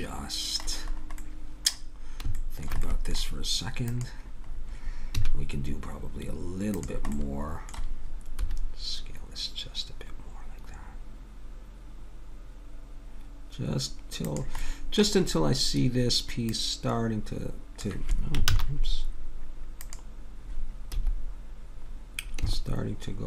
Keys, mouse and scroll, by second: 0.8-3.0 middle drag, 3.9-5.8 drag, 5.2 a, 6.7-8.7 drag, 8.4 s, 14.6-16.5 middle drag, 16.5-18.3 drag, 18.4 ctrl+z, 19.8-21.7 drag, 20.9 s.